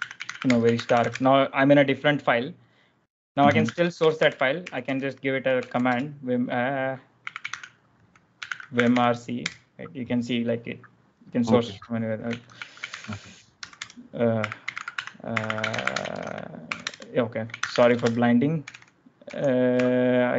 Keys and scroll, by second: 0.0-1.5 typing, 3.1-9.3 typing.